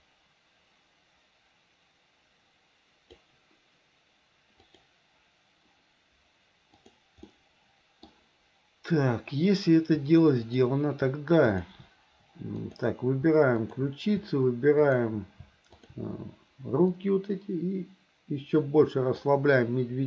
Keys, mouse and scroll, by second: 4.7 click, 6.8 click, 7.3 middle click, 10.4 shift+click, 11.6 shift+click, 12.6 click, 13.6 shift+click, 14.8 shift+click, 15.8 shift+click, 16.9 click, 17.3-19.3 drag.